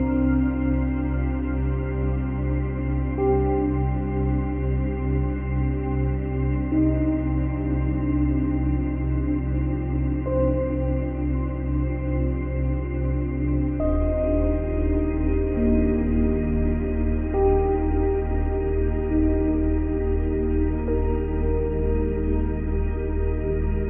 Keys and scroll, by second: 0.0 space, 3.5 ctrl+c, 3.8 ctrl+v, 14.7 ctrl+z.